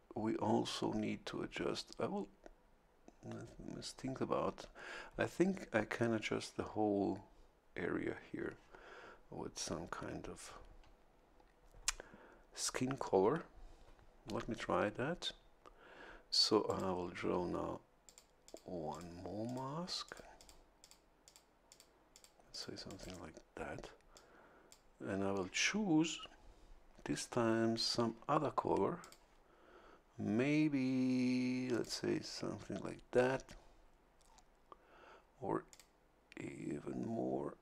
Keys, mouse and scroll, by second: 16.6 click, 18.0 click, 18.4 click, 18.9 click, 19.4 click, 20.0 click, 20.8 click, 21.2 click, 21.7 click, 22.1 click, 22.5 click, 22.8 click, 23.0 right click, 24.1 click, 29.0 click, 31.7 click, 35.7 click.